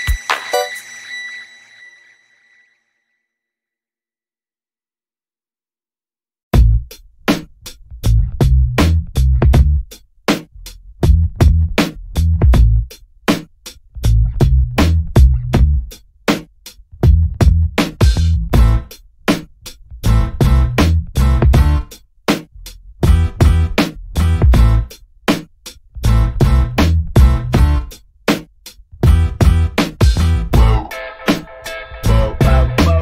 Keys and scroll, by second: 9.5 alt+a, 18.7 1, 31.7 Escape.